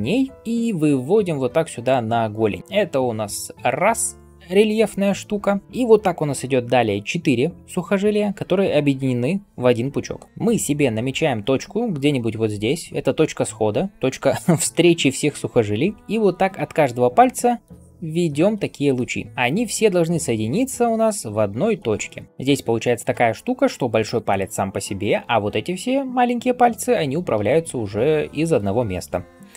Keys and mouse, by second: 3.7 [, 3.7-5.4 [.